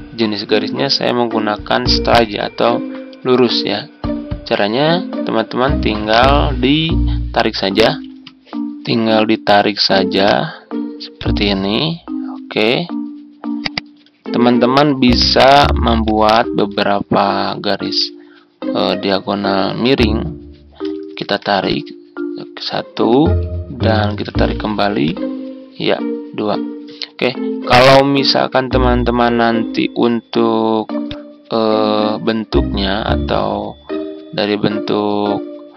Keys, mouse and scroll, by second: 13.8 ctrl+click, 15.9 click, 16.9 ctrl+scroll up 1, 21.1 ctrl+d, 21.6-23.5 drag, 24.2 ctrl+d, 25.0-26.5 drag, 27.8-31.0 ctrl+scroll up 1, 31.0-35.5 drag.